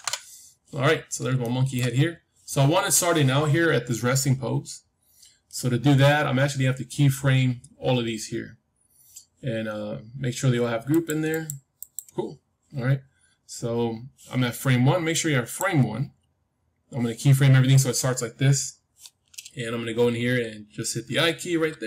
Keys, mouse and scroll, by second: 1.4-3.5 middle drag, 10.8-13.7 drag, 15.0-17.0 drag, 21.6 i.